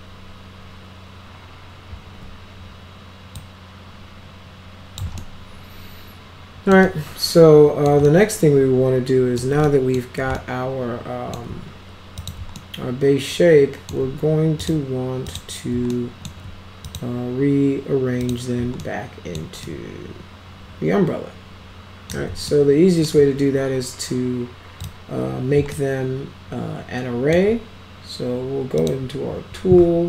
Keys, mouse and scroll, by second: 2.0 ctrl+scroll down 2, 3.4-5.0 drag, 5.2-6.7 alt+middle drag, 6.9-7.9 alt+middle drag, 8.1-9.4 alt+middle drag, 9.7 middle click, 10.4-11.4 alt+middle drag, 12.2 click, 12.6-13.9 alt+middle drag, 14.6 click, 15.3 click, 15.9-16.3 alt+middle drag, 16.9 click, 18.2 click, 18.8-19.4 alt+middle drag, 19.7-22.1 alt+middle drag, 22.5-23.1 alt+middle drag, 24.8 click, 25.8-27.4 alt+middle drag, 28.8 click.